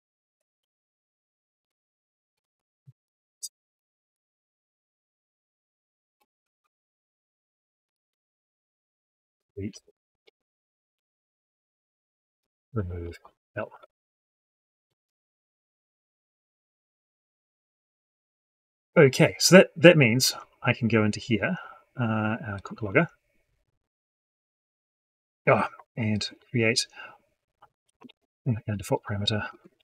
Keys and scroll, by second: 1.5 ctrl+shift+Up, 2.4 ctrl+shift+Down, 27.9 ctrl+shift+Up.